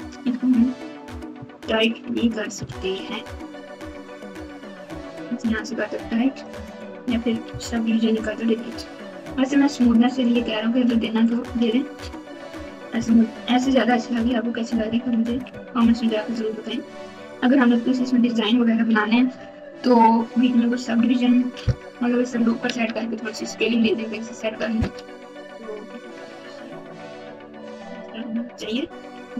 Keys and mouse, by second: 1.3 Tab, 2.9 ctrl+r, 7.6 ctrl+z, 10.0 click, 11.9 Tab, 13.2 KP_8, 14.2 ctrl+KP_8, 14.8 ctrl+KP_2, 16.4 ctrl+KP_8, 20.9 Tab, 26.7 KP_8, 27.8 ctrl+KP_2, 28.4 ctrl+KP_2.